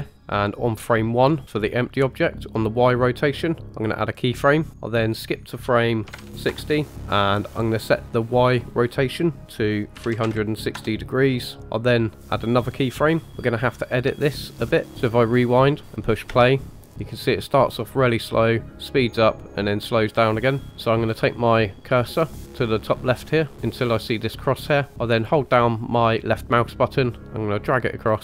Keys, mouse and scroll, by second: 4.0 click, 5.0-6.4 drag, 8.2-10.7 drag, 11.6 middle click, 12.4 click, 13.7 scroll down 2, 14.2-14.5 shift+middle drag, 14.9 click, 14.9 space, 16.2 space, 20.7 click, 26.2-28.2 drag.